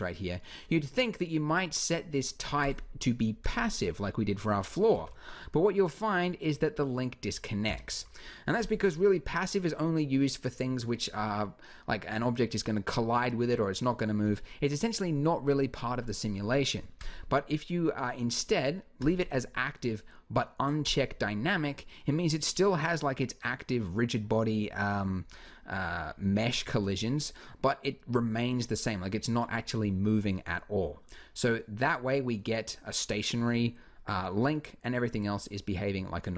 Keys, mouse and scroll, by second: 3.0-4.3 drag, 4.7 alt+a, 7.4 Escape, 16.8-18.7 drag, 20.6-24.3 drag, 26.6 alt+a, 30.9-33.4 drag.